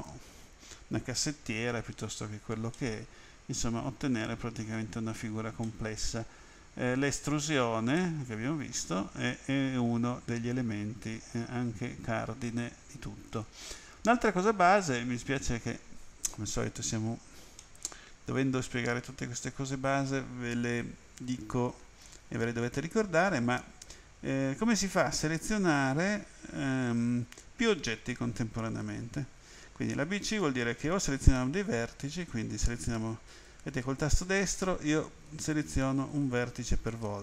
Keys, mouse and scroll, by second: 2.8 middle click, 5.7 middle click, 8.0 middle click, 17.6 middle click, 30.3 click, 32.1 right click, 33.3 right click, 34.3 right click, 35.3 right click.